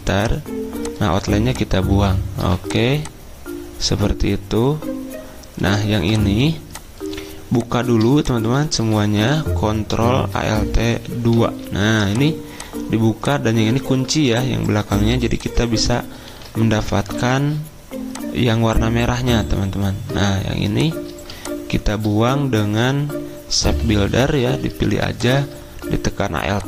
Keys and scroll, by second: 4.3 v, 10.7 alt+2, 11.3 alt+2, 14.2 z, 14.9 2, 16.2 z, 17.1 ctrl+2.